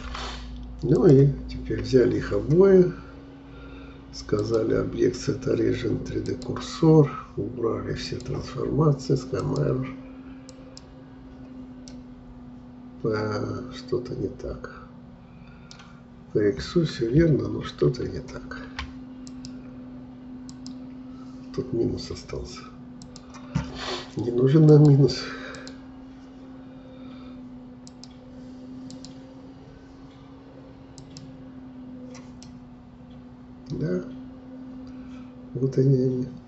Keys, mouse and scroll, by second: 1.0-4.1 drag, 4.4-7.4 drag, 8.0-11.9 drag, 11.9-14.9 middle drag, 17.9 ctrl+z, 19.3-32.4 drag, 32.4-35.4 middle drag.